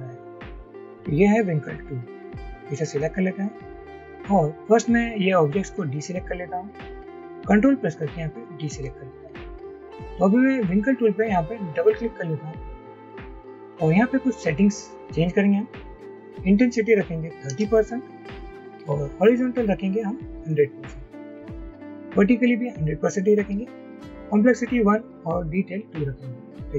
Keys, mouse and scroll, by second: 8.4 ctrl+click, 11.9 double click, 17.3-17.6 typing.